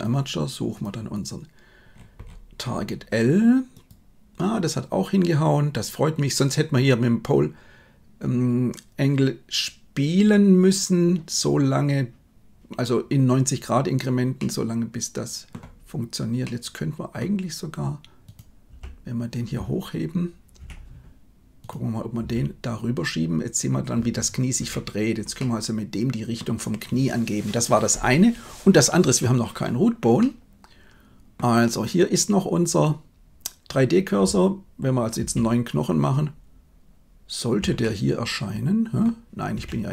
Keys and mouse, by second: 0.6-3.9 drag, 14.4-15.4 middle drag, 16.3-17.1 middle drag, 18.8 g, 25.4-26.4 middle drag, 28.8-29.2 middle drag, 30.2-31.5 middle drag, 35.1 shift+a, 37.8-39.2 middle drag, 39.6 Tab.